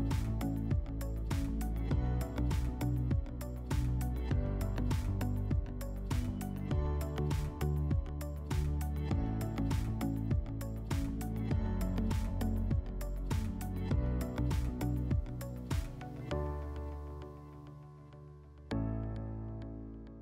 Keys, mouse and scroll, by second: 2.6 click, 3.6 click, 6.4 click, 13.8 click, 18.7-20.2 drag.